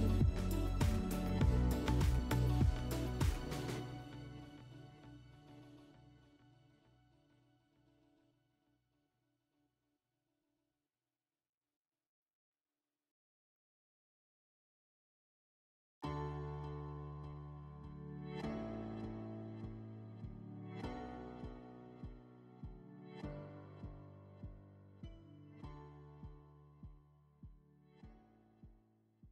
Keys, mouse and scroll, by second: 0.0 click, 3.9 click, 4.4 e, 7.5 click, 8.1 r, 11.9 click.